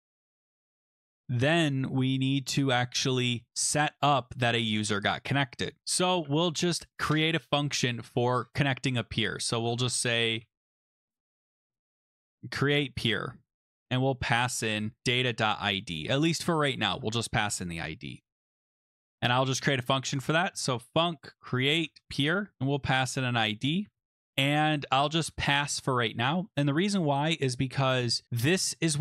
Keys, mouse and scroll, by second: 0.0-1.3 typing, 4.0 click, 4.1-4.7 scroll, 5.5 scroll, 5.8 click, 6.7-8.8 scroll, 8.8-10.4 scroll, 10.1-15.7 typing, 11.5 click, 18.2 click, 18.4 click, 18.7 Return, 18.8 Return, 18.9-25.8 typing.